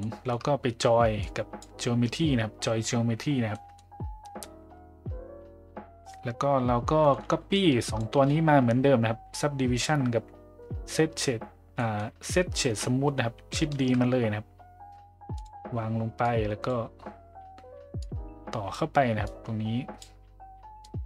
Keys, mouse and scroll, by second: 0.0 middle click, 1.2 click, 3.5 middle click, 7.0 middle drag, 7.6-8.0 drag, 11.8 middle click, 13.8 shift+d, 16.2-16.7 drag, 18.1-18.7 drag, 19.2-20.0 drag, 20.8-21.0 drag.